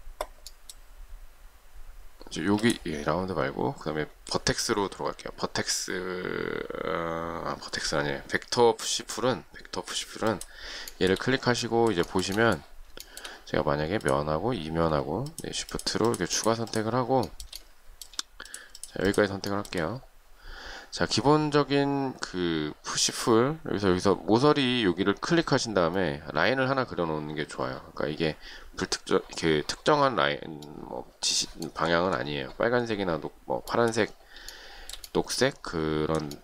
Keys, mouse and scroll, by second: 2.6 space, 11.1 shift+middle click, 12.3 shift+middle click, 13.3 shift+middle click, 15.4 shift+click, 15.9 shift+click, 16.0 shift+double click, 16.2 shift+click, 16.6 shift+click, 16.7 shift+double click, 16.9 shift+click, 17.4 shift+middle click, 18.7 shift+click, 19.0 shift+click, 19.1 shift+double click, 19.3 shift+click, 19.7 shift+middle click, 34.7 shift+middle click.